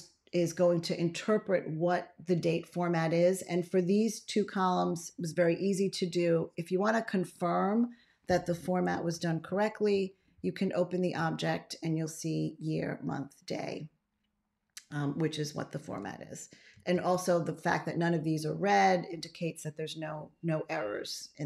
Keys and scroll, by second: 9.8 ctrl+a, 16.6 ctrl+x.